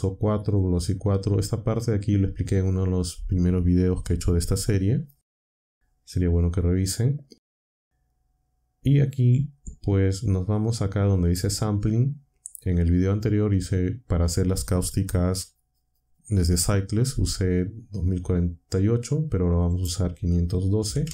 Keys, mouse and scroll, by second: 11.2 click, 19.7 click, 20.5-21.1 typing.